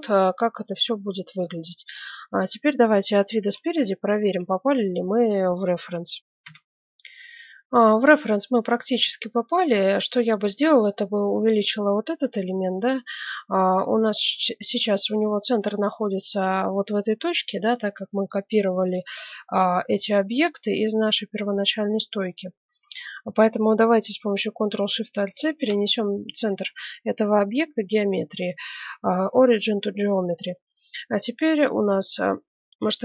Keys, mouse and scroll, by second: 1.9-4.0 middle drag, 3.0 KP_1, 6.2 middle click, 6.4 F9, 9.4 middle click, 10.3-12.0 right drag, 12.0-13.8 middle drag, 12.3 s, 15.0-19.9 middle drag, 22.3-24.8 middle drag, 30.3-32.2 middle drag.